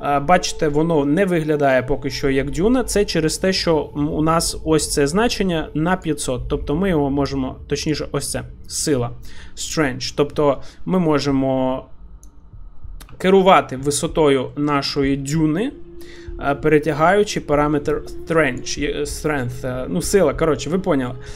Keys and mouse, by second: 6.0-7.3 drag, 8.0-12.3 drag, 13.2 shift+middle click, 13.7-14.4 middle drag, 14.5 shift+middle drag, 14.9 middle click, 18.8-21.3 shift+drag.